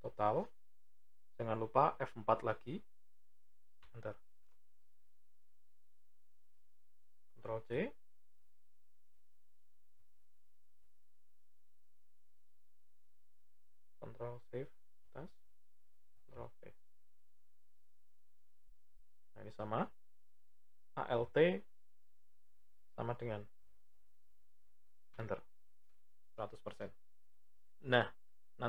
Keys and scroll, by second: 2.0 F4, 7.2 ctrl+c, 9.2 Left, 10.3 ctrl+Down, 11.4 Right, 12.7 Up, 13.8 ctrl+shift+Up, 16.3 ctrl+v, 20.7 alt+=.